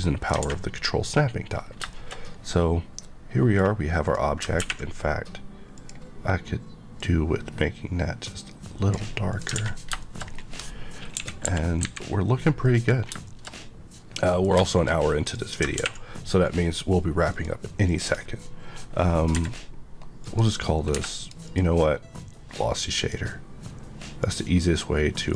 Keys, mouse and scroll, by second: 0.4 alt+a, 0.6 middle click, 1.6 scroll down 1, 1.9 shift+middle click, 4.0 click, 5.7 click, 6.9 click, 8.8 click, 9.5 alt+a, 10.0 shift+middle click, 10.3 middle click, 11.1 KP_1, 11.4 KP_5, 12.6 KP_3, 12.6 middle click, 12.9-13.2 scroll up 2, 13.2 shift+middle click, 15.2 click, 17.3 click, 17.8 click, 19.3 Escape, 20.2 click, 20.9 Escape, 21.2 click, 22.9 click.